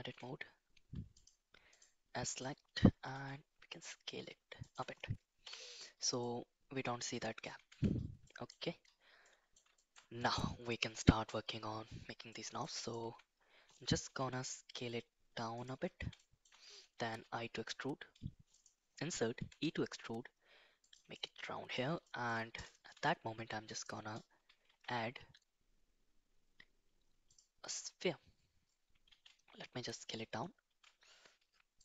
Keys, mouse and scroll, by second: 0.1 2, 1.1 click, 1.7 alt+click, 2.3 alt+shift+click, 3.1 s, 5.4 /, 6.1-7.4 middle drag, 7.6 Tab, 8.2 middle drag, 9.2 middle drag, 9.7 middle drag, 11.0 middle click, 12.2 middle click, 13.0 Tab, 14.1 s, 16.1 shift+middle click, 17.1 i, 19.3 e, 21.1 middle click, 22.0 shift+middle click, 22.9 shift+s, 24.6 shift+a, 29.0 s.